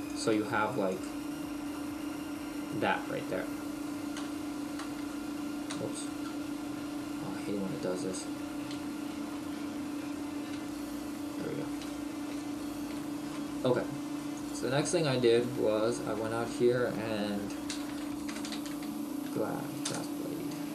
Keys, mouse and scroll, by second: 0.2 click, 1.1 click, 1.7 middle click, 4.2 KP_1, 6.4 KP_Decimal, 6.7-7.3 scroll down 1, 8.7 shift+middle click, 9.9-10.6 scroll up 3, 10.6 scroll up 1, 10.6 KP_Decimal, 11.5 scroll down 1, 11.9 shift+middle click, 12.4-13.0 scroll down 1, 13.0 shift+middle click.